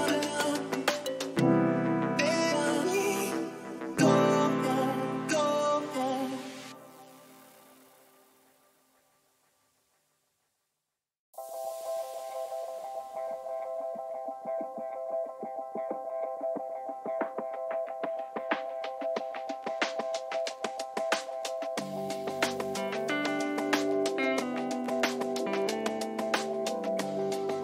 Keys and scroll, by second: 14.2 Return, 15.5 ctrl+-, 22.8 ctrl+t.